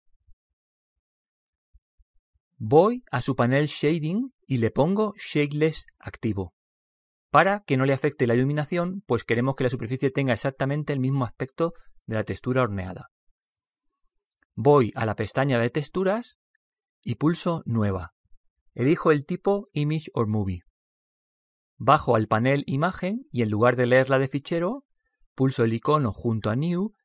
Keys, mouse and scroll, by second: 3.3-5.8 middle drag, 3.3 scroll down 1, 4.6 scroll down 1, 5.8 click, 16.2 click, 19.8 click, 22.3 click, 25.9 click.